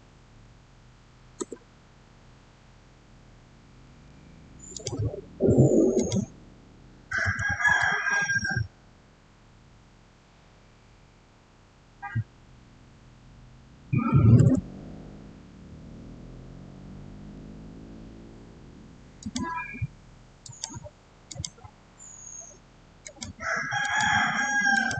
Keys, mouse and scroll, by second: 0.2 Return, 4.6 click, 7.1 6, 14.3 Return, 19.0 click.